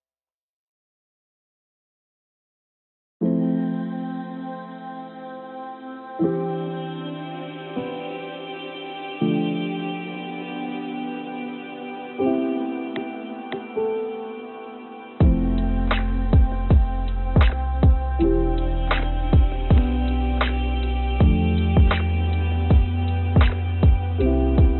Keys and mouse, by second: 13.3 s, 19.9-22.6 drag, 23.1 click, 24.0 ctrl+z, 24.2 ctrl+z.